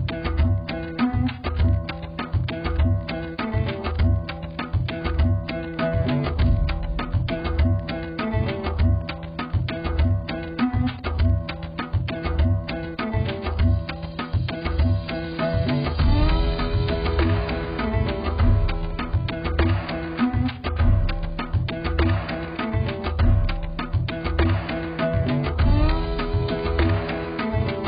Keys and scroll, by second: 25.3 z.